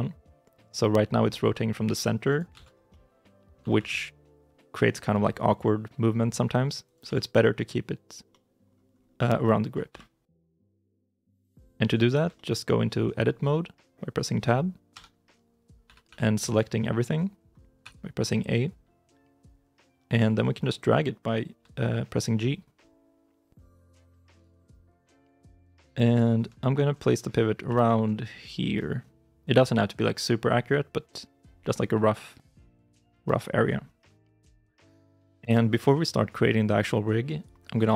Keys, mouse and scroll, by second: 1.3 r, 2.4 ctrl+z, 2.6 scroll down 1, 2.8 middle click, 3.5 r, 6.9 ctrl+z, 8.2 middle click, 8.8 scroll up 1, 9.8 KP_3, 10.6 KP_9, 12.2 shift+middle click, 14.8 Tab, 15.7 a, 20.0 g, 24.3 shift+click, 24.9 shift+middle click, 25.3-26.0 scroll up 1, 26.1 shift+middle click, 26.5-27.5 scroll up 1, 27.5 g, 29.4 shift+click, 33.5 scroll down 1, 34.2 Tab, 36.2 shift+middle click.